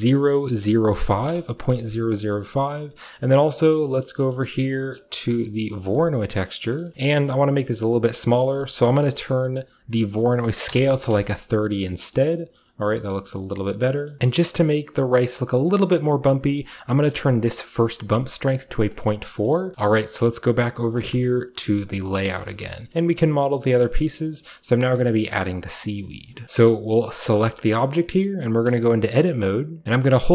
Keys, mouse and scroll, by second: 0.9 typing, 1.3 Return, 2.1-3.0 middle drag, 2.1-2.9 typing, 3.2-3.5 middle drag, 3.4 scroll down 1, 3.7 middle click, 4.0 middle click, 4.3 middle click, 4.6 middle click, 4.7 scroll up 1, 5.0 middle drag, 5.3 drag, 5.3-6.4 scroll up 1, 6.6 middle click, 6.7-8.8 scroll up 1, 6.8-7.9 middle drag, 7.9 click, 8.8-9.5 scroll up 1, 9.5-10.0 scroll up 1, 10.7-11.6 typing, 12.2 middle click, 12.6 middle drag, 12.9 middle drag, 13.0-13.8 typing, 13.4 middle click, 13.8-14.2 scroll down 1, 14.2 Return, 14.2-15.2 drag, 14.2-15.0 scroll up 1, 15.0-15.7 scroll up 1, 15.7-16.8 drag, 15.7-16.1 scroll up 1, 16.7-18.1 scroll up 1, 17.1 click, 18.1 click, 18.8 click, 19.7-21.0 scroll down 1, 21.0 click, 21.7-22.9 scroll down 2, 21.8-23.8 middle drag, 22.9-23.8 scroll up 2, 23.8-25.8 scroll up 1, 24.0 middle click, 24.2-25.8 shift+middle drag, 26.0 middle click, 26.0-26.4 shift+scroll up 2, 26.2 shift+middle drag, 29.8 Tab, 29.9 middle click, 30.2 middle click.